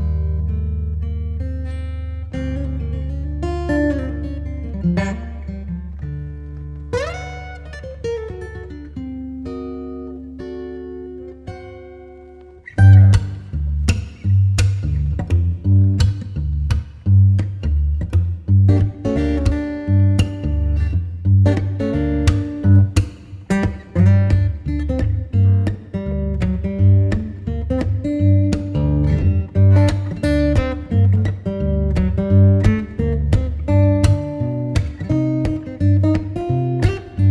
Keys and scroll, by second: 6.3 Return, 13.3 Return.